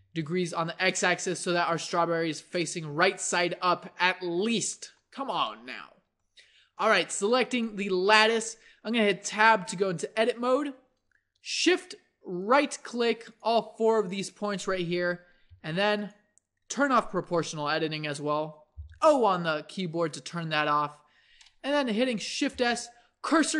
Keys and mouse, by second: 1.0-5.6 middle drag, 9.3 Tab, 15.5 g, 18.7 o, 22.5 shift+s.